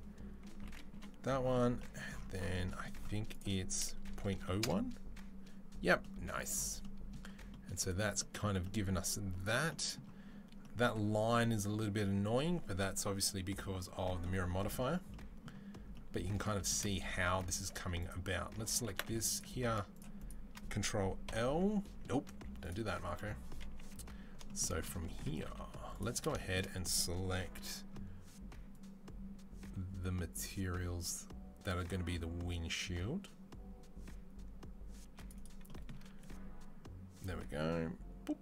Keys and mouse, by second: 9.5-38.4 right drag.